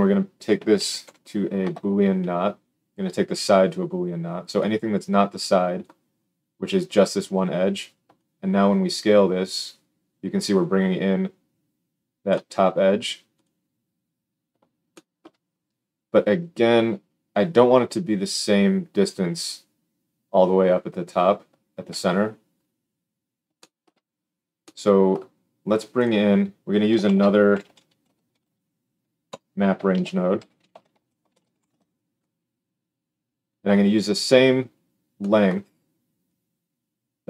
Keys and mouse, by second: 3.3-4.5 middle drag, 4.5-13.4 drag, 13.4-25.9 middle drag, 25.9 drag, 26.0-36.2 middle drag, 27.0 shift+a, 29.8 shift+a, 36.2-37.2 drag.